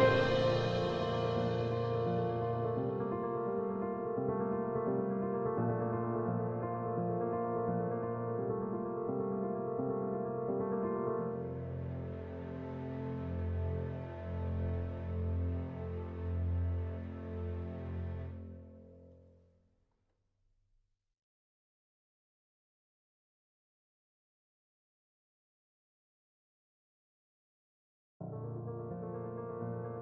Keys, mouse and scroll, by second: 0.0-1.9 drag, 1.9-3.7 typing, 5.8 click, 7.3 ctrl+right click, 7.6 ctrl+r, 8.5 click, 9.4 End, 9.9 shift+Home, 10.9 q, 12.4 ctrl+space, 13.1 click, 13.9 End, 14.4 shift+Home, 15.1 shift+s, 15.7 q, 17.4 ctrl+space, 18.5-19.8 drag, 19.8 ctrl+right click, 20.2 click, 21.0 End, 21.4 shift+Home, 22.6 shift+m, 23.9 d, 24.3 ctrl+space, 25.2 click, 26.6 End, 27.2 shift+Home, 27.5-30.0 typing.